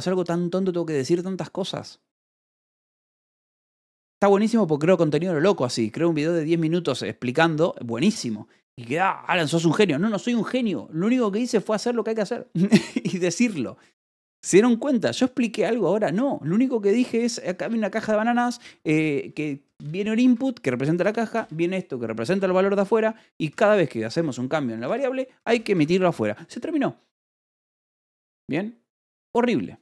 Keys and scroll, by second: 8.5 Escape, 17.2 j, 17.4 Escape, 17.7 k, 18.3 j, 20.2 Escape, 20.9 j, 21.8 shift+v, 22.2 Escape, 22.7 j, 23.9 shift+v, 24.7 Escape, 25.0 j, 25.6 Escape.